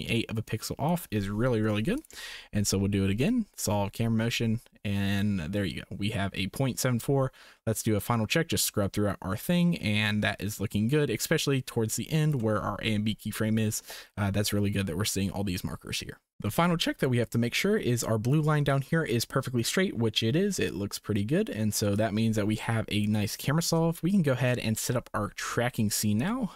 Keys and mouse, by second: 1.7 Delete, 3.2-4.7 drag, 7.8-12.3 drag, 17.6 click, 21.9 click, 22.5 click, 24.0 shift+click, 26.2 click.